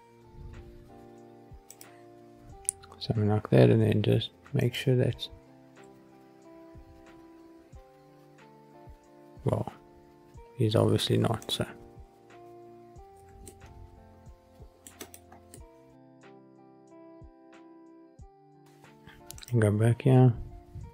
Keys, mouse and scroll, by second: 1.6 click, 2.4-3.0 scroll up 4, 4.5 click, 5.8 g, 7.7 g, 11.4 click, 13.1 g, 13.4-14.6 middle drag, 14.8 scroll up 1, 15.0 click, 15.4-16.1 middle drag, 17.0 g, 18.3 click, 19.3 click.